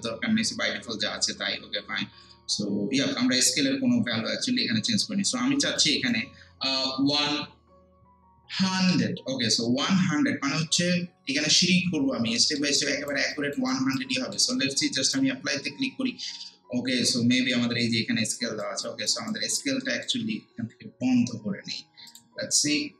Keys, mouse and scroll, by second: 2.4 scroll down 1, 4.7 scroll up 1, 5.8 click, 7.0 1, 10.7 scroll down 1, 12.4 alt+middle click, 12.8 alt+right click, 13.3 alt+click, 13.7 alt+right click, 14.2 alt+middle click, 15.1 click, 16.3-16.9 scroll down 1, 18.4 alt+right click, 18.8 click, 19.3 alt+right click, 19.8 alt+middle click, 22.1 click.